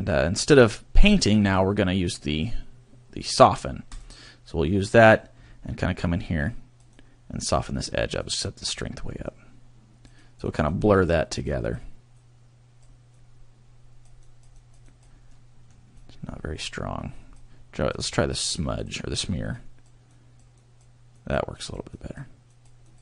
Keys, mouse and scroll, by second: 0.0 click, 4.0 click, 5.4-5.9 scroll up 2, 5.9 scroll up 2, 6.0 click, 7.0 click, 8.2 click, 9.2 click, 10.3 click, 10.6 click, 10.8 click, 11.4 click, 12.1 click, 13.2 click, 14.3 click, 14.7 click, 15.1 click, 15.3 middle click, 16.0 click, 18.8 click, 19.5 click, 20.2 click, 20.6 click, 21.3 click, 21.6 click, 22.0 click, 22.6 click, 22.9 click.